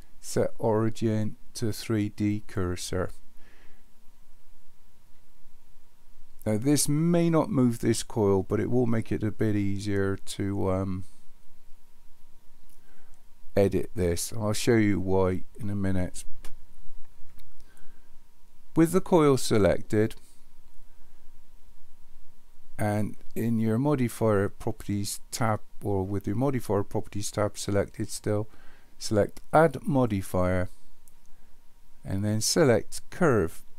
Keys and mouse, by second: 29.9-33.3 drag.